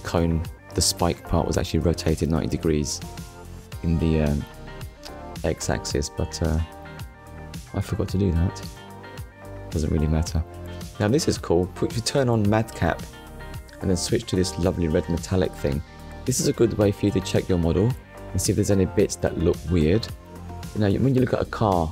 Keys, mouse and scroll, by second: 0.6 click, 2.3 shift+middle click, 5.6 click, 8.2 click, 9.6 click, 11.6 click, 12.5 click, 12.9 middle click.